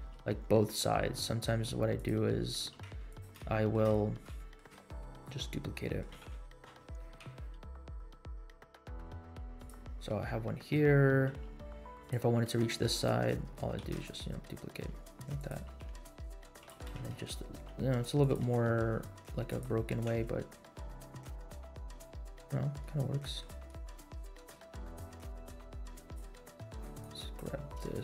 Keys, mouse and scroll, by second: 0.0 g, 2.2 middle drag, 2.6 g, 3.5 shift+middle click, 3.9 scroll up 2, 4.3 shift+middle drag, 4.7 scroll down 1, 5.0-5.3 middle drag, 5.8 middle click, 6.1 s, 9.8 scroll down 2, 10.2 middle click, 11.3 r, 12.9-13.2 middle drag, 13.9 shift+d, 15.7 r, 16.7 g, 18.3 g, 20.2 space, 22.3 space, 22.6 scroll up 1, 22.8-23.4 middle drag, 24.3 shift+click, 25.3 click, 26.0-26.3 drag, 26.8 click, 27.0 click, 27.7-28.0 drag.